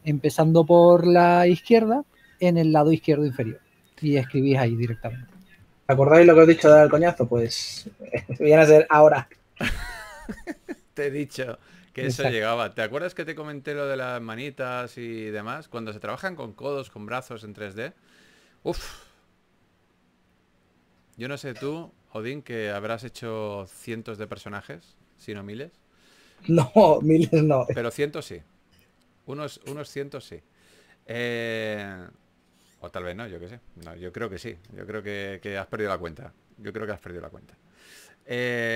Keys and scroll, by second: 0.2-0.5 typing, 4.6-6.1 typing, 7.9-8.9 typing, 10.8-12.3 typing, 14.2 shift+s, 16.0-17.0 typing, 19.3 typing, 22.6 s, 26.8-28.8 typing, 35.7-36.5 typing.